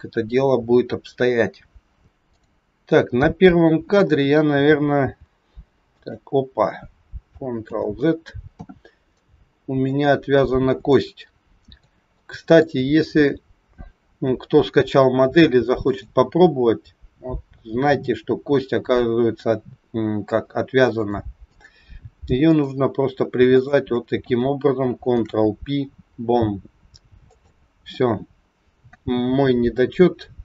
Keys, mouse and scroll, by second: 2.2 click, 5.0 g, 7.6 ctrl+z, 9.2 middle click, 10.3-10.7 scroll up 6, 10.8 shift+middle click, 12.0 middle click, 12.9-13.6 scroll up 2, 16.4 click, 20.8 click, 22.4 click, 23.5 shift+click, 23.7 shift+click, 25.2 ctrl+p.